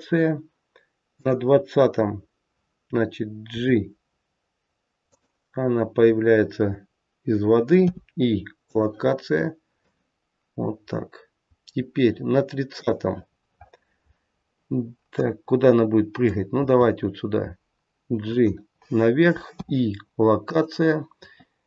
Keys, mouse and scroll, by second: 1.1 click, 3.5 g, 7.7 i, 9.8 click, 13.4-15.1 scroll down 3, 15.1 middle click, 16.5 g, 19.4 i.